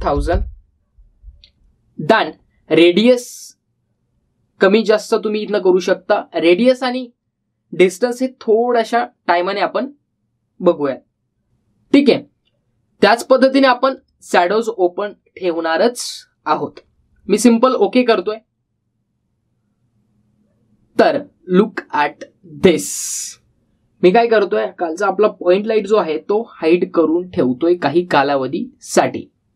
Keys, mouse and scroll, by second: 2.9 click, 14.2 click, 18.9 click, 26.5 click.